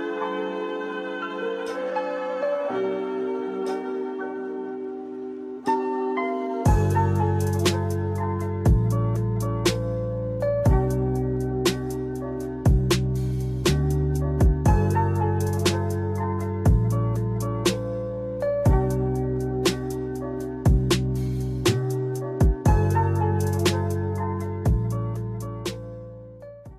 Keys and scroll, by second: 0.4 space, 17.1 ctrl+s.